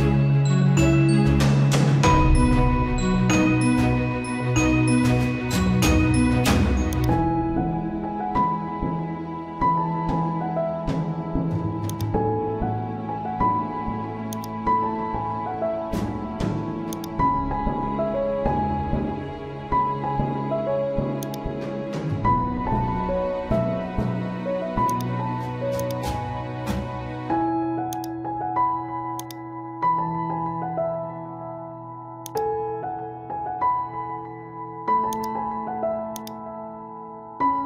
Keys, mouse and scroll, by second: 6.9 click, 10.6 click, 10.6 typing, 15.7-17.3 typing, 16.9-18.8 drag, 18.8 ctrl+z, 21.2 click, 22.6 z, 24.0 z, 24.9-37.1 drag, 37.1 ctrl+z.